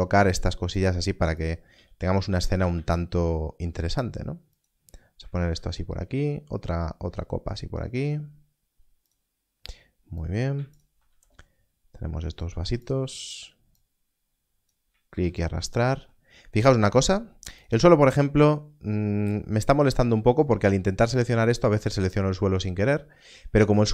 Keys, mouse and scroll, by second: 0.7 click, 1.7 g, 2.4 click, 2.7 shift+d, 4.5 click, 5.4 shift+d, 9.0 click, 12.8 click, 15.1 shift+d, 17.6 click.